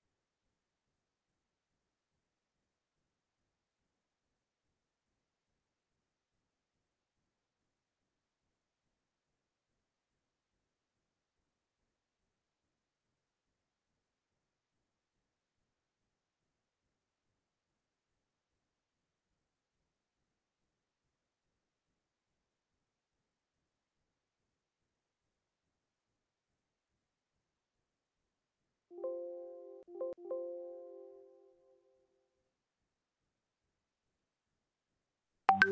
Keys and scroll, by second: 3.1 ctrl+z, 34.6 ctrl+space.